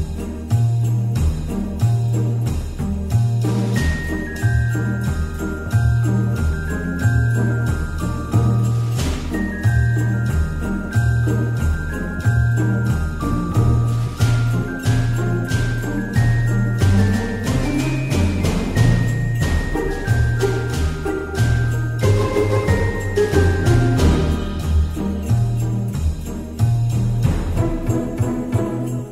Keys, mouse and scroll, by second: 17.5 ctrl+d.